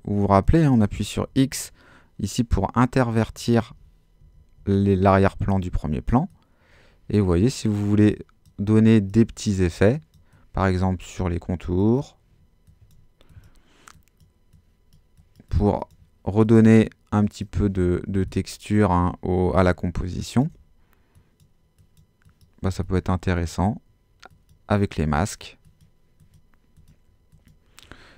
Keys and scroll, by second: 0.4 x, 3.3 x.